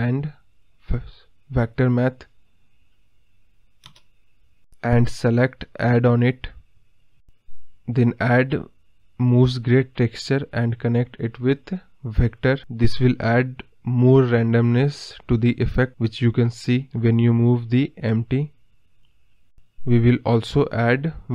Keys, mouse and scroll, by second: 0.8 shift+d, 6.5-9.9 drag, 12.9-14.4 drag, 14.4 g, 17.4 ctrl+z.